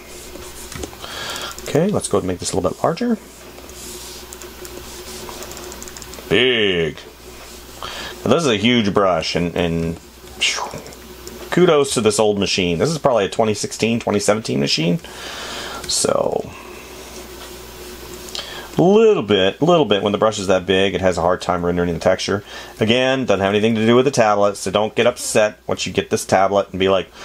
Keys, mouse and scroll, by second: 1.1 space, 9.4 space, 12.8 space.